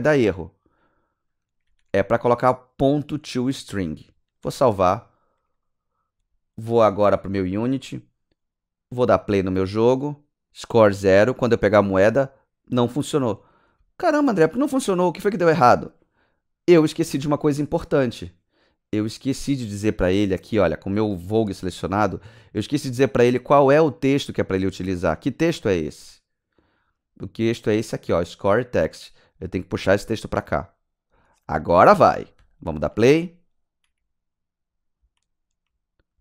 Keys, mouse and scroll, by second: 4.1 click, 4.4 ctrl+s, 7.4 s, 7.5 click, 9.2 click, 11.4 click, 13.5 w, 16.7 w, 16.7 click, 19.0 click, 26.6 click, 26.9 click, 29.0 click, 32.4 click, 35.0 w.